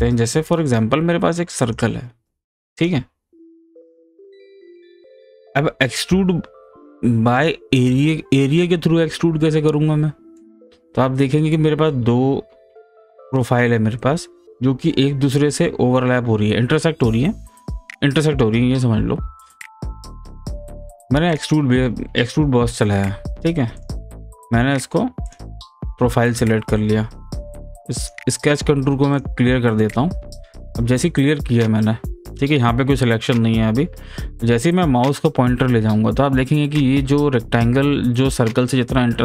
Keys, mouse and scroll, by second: 0.7 click, 1.6 click, 3.2 scroll down 1, 3.4 scroll up 1, 4.5 click, 5.1-5.5 scroll down 1, 5.5-7.4 scroll up 1, 7.4 click, 9.0-14.1 middle drag, 21.3 click, 23.8 click, 27.7 click, 28.0 right click, 29.1 click.